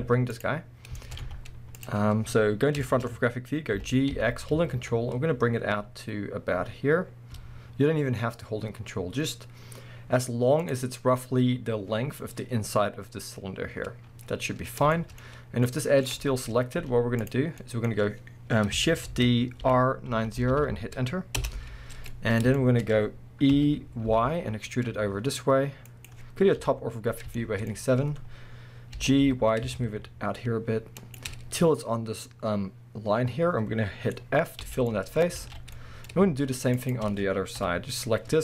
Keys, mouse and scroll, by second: 1.0-10.7 shift+middle drag, 1.2 z, 3.1-3.7 scroll up 2, 3.7 g, 10.7-13.9 drag, 13.9-14.9 scroll down 2, 14.9-21.5 shift+middle drag, 15.3 scroll up 2, 16.8 z, 17.9-19.1 scroll up 2, 19.1 shift+d, 21.5 Return, 22.1 middle click, 22.6 shift+middle click, 23.5 e, 26.0 click, 26.6 KP_7, 27.4-31.2 shift+middle drag, 27.7-28.5 scroll up 2, 28.5-29.0 scroll down 2, 29.0 g, 31.2 shift+click, 34.1 scroll down 2, 34.2-36.7 middle drag, 34.6 f, 35.3 scroll up 1, 35.4 alt+a, 36.7 alt+shift+click, 37.6 KP_7.